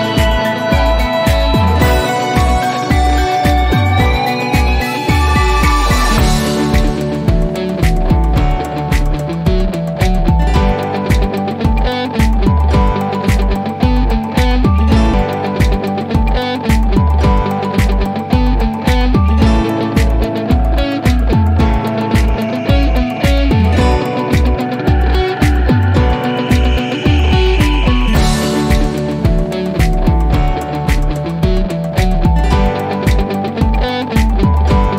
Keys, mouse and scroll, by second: 4.2-5.6 scroll up 1, 7.9-9.4 drag, 11.6 3, 12.4 Return, 14.3-15.6 drag, 17.9-18.4 typing, 19.1 Return, 20.9-22.8 drag.